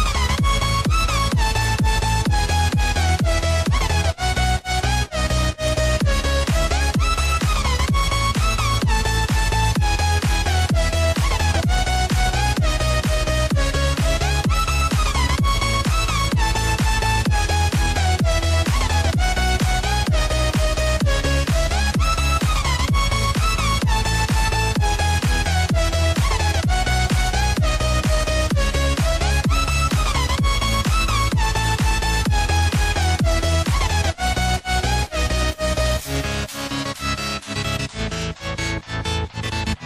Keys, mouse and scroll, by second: 0.3 click, 1.4 click, 1.7-3.1 scroll down 1, 3.1-4.6 drag, 4.6-5.1 scroll up 1, 5.7 click, 6.7-7.5 scroll up 1, 7.5 click, 8.1 click, 9.3-10.4 drag, 12.9 shift+d, 17.5 click, 25.6 click, 28.8 click, 29.7-31.0 scroll down 2, 31.0-33.2 drag, 34.0-34.9 scroll down 1, 34.9 click, 35.9 click, 38.4-39.8 drag.